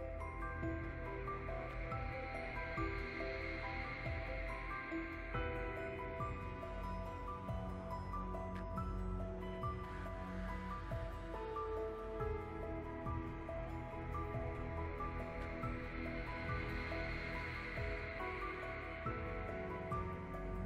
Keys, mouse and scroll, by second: 0.0 click, 0.3 middle click, 0.4 drag, 0.5 middle click, 0.5 f, 0.6 click, 0.7 middle click, 0.9 f, 1.0 click, 1.8-2.1 middle drag, 2.1 f, 2.3 middle drag, 2.3 click, 2.6 middle click, 2.8 f, 2.8 drag, 3.0 middle click, 3.1 click, 3.3 middle click, 3.4 click, 3.7 click, 3.8 f, 3.9 click, 4.2 middle click, 4.3 click, 4.4 middle click, 4.6 click, 4.8 middle click, 4.9-5.4 drag, 5.4 middle click, 5.6 click, 6.5 f, 6.6-7.6 drag, 7.6 middle click, 7.8 click, 8.1 shift+middle click, 8.4 click, 8.5 middle click, 8.6 click, 8.8 middle click, 8.9 scroll down 2, 9.1 click, 9.2 f, 9.3-10.0 drag, 10.0 middle click, 10.1 f, 10.2 middle click, 10.2 click, 10.7 middle drag, 10.9 click, 11.3 f, 11.4 f, 11.5 click, 11.9 f, 11.9 click, 12.1 f, 12.3 click, 12.5 middle click, 12.6 click, 12.7 middle click, 12.7 scroll up 1, 12.9 click, 13.0 ctrl+z, 13.1 click, 13.3 f, 13.4 middle click, 13.4 scroll up 1, 13.5 f, 13.6 click, 14.0 f, 14.1 click, 14.5 f, 14.6 click, 14.7 middle click, 14.8 scroll down 1, 14.8 middle click, 15.0 click, 15.3 middle drag, 15.5 click, 15.7 ctrl+z, 15.7 middle click, 15.8-16.3 drag, 16.3 middle click, 16.5 drag, 16.6 middle click, 16.6-16.9 drag, 16.9 middle click, 17.1 drag, 17.3 middle click, 17.5 click, 18.0 middle click, 18.1 scroll down 1, 18.2 click, 18.3 f, 18.4 click, 18.6 f, 18.7 click, 19.6 scroll up 2, 19.7 click, 20.1 middle click, 20.4 click.